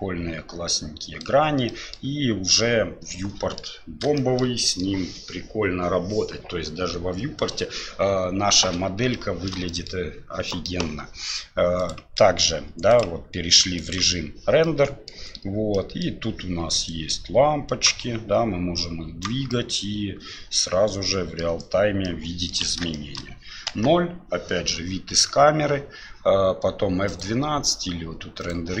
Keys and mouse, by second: 1.7 middle drag, 2.5-3.6 middle drag, 4.1-4.8 shift+middle drag, 9.3 shift+middle click, 9.7 middle click, 10.5 middle click, 11.8 click, 12.9 click, 13.8 click, 14.6 middle click, 15.9 right click, 16.9 right click, 18.8 right click, 19.6-21.4 middle drag, 22.1-22.5 middle drag, 23.0 shift+click, 23.7 KP_0, 27.2-28.8 drag.